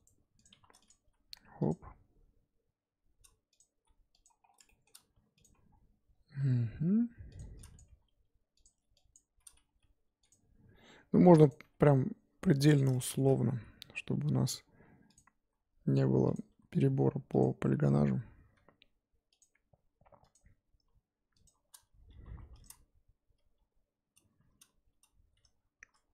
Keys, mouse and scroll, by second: 0.5 1, 0.9 click, 1.0 g, 3.6 click, 3.7 g, 4.4 scroll down 3, 4.6 shift+middle click, 5.4 click, 5.5-6.4 scroll up 2, 6.4 e, 7.7 click, 7.8 g, 9.1 click, 9.6 g, 10.5 e, 11.6 e, 12.9 shift+middle click, 13.5 e, 15.4 e, 16.5 e, 18.5 e, 19.5 e, 21.4 shift+click, 22.0 f, 22.4 2, 22.6 click, 22.9 f, 23.5 f.